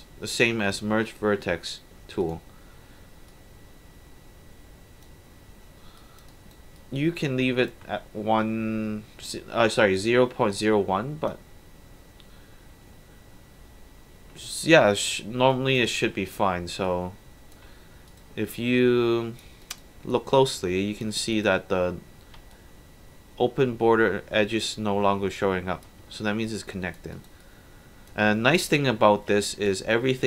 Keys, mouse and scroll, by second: 0.7 click, 2.2 click, 3.3-5.0 drag, 6.0 alt+click, 6.3 alt+right click, 6.8 alt+click, 8.4-10.6 drag, 15.5 alt+drag, 16.9-17.5 alt+drag, 18.1 alt+click, 18.6 alt+click, 19.6 alt+right click, 20.1 alt+click, 21.3 click, 22.5-24.6 alt+drag, 26.1 alt+1, 26.6 alt+click, 27.1 alt+right click, 27.4 alt+click, 29.7-30.2 drag.